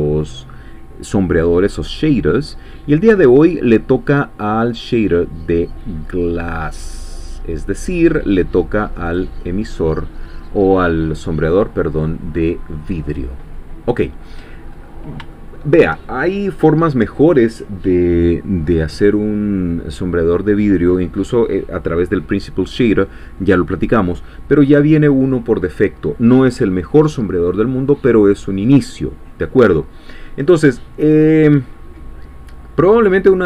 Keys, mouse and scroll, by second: 9.1 click, 11.8-14.4 drag, 14.6-15.1 scroll up 2, 15.3 shift+click, 16.0-31.6 shift+drag.